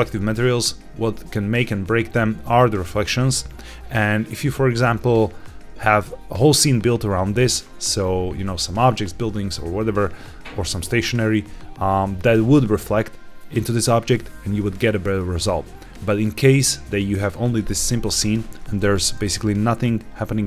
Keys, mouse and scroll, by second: 5.3-6.3 scroll down 2, 18.7-20.4 middle drag.